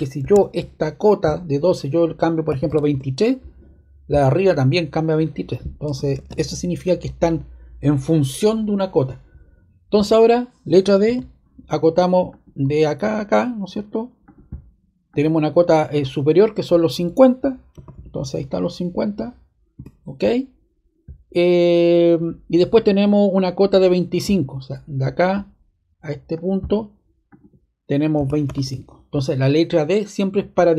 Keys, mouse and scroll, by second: 0.7 ↺, 2.2-3.1 typing, 6.1 super+z, 11.0 d, 12.2 click, 14.2 click, 15.1 click, 17.4-18.4 typing, 19.7 Return, 25.0 click, 26.3 click, 27.2 click, 28.1-28.4 typing, 28.6 Return.